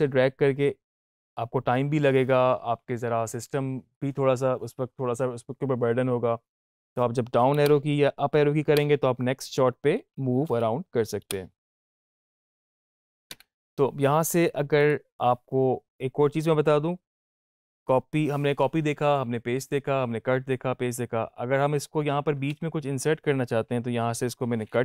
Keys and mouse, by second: 14.0 Up, 14.7 click, 22.3 ctrl+x.